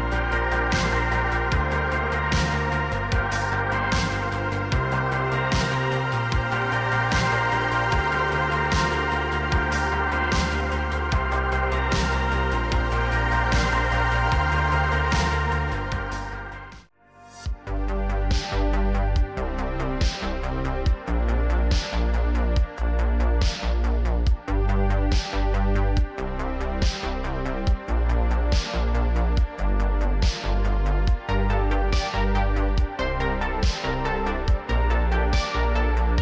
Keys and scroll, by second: 0.0-2.7 typing, 3.7 ctrl+z, 4.7-12.1 typing, 21.4 ctrl+Tab, 24.4 ctrl+Tab, 25.0 r, 26.1 r, 26.3 x, 28.7 g, 31.1 r, 33.2 r, 34.2 g.